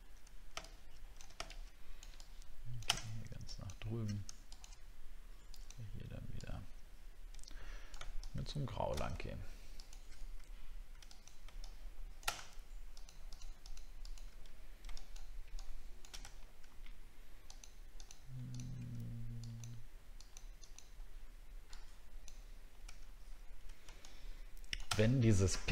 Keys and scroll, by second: 16.3 alt+scroll up 4, 23.0 alt+scroll down 1, 25.1 alt+scroll up 7.